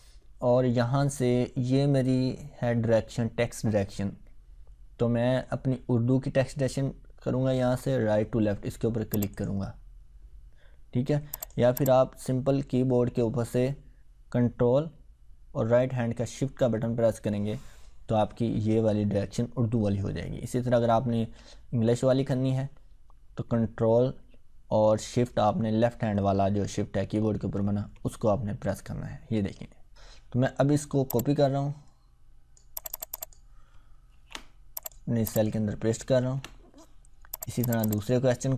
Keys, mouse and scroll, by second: 9.1 click, 13.0 ctrl+z, 31.1-32.6 drag, 34.7 click, 37.5 click.